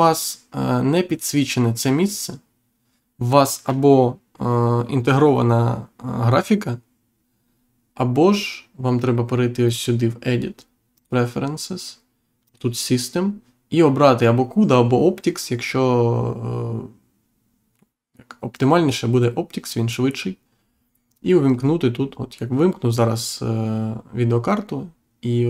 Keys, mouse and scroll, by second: 9.7 click, 10.9 click, 12.4 click, 18.5 click, 21.4 click.